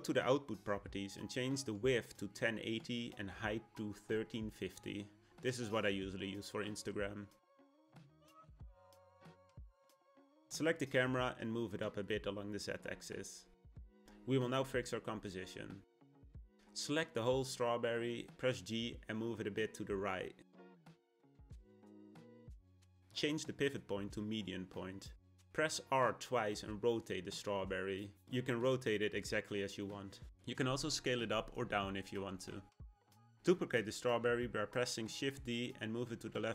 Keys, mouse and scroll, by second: 0.8-3.9 drag, 10.1 click, 10.9 click, 11.6 g, 15.8 click, 17.9 g, 21.2 r, 23.2 ., 25.6 r, 28.2 s, 33.8 shift+d.